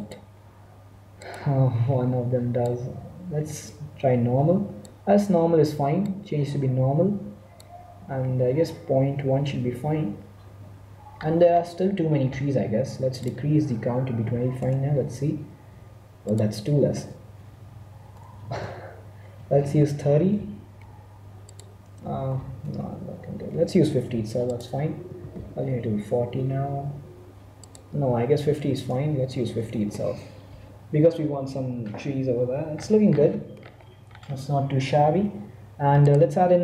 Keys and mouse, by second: 2.6-4.3 drag, 6.0-7.8 drag, 12.6 middle click, 13.3-14.9 drag, 16.3-18.0 drag, 18.4 BackSpace, 21.6-23.4 drag, 24.6-26.3 drag, 27.6-29.1 drag, 33.0-34.7 middle drag, 36.0-36.6 right drag.